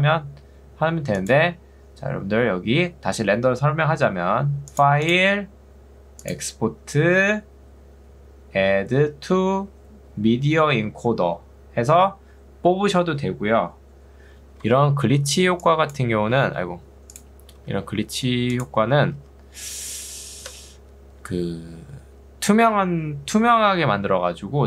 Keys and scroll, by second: 14.7 Escape, 15.5 ctrl+2, 16.5 ctrl+z, 17.7 ctrl+2, 20.5 Escape.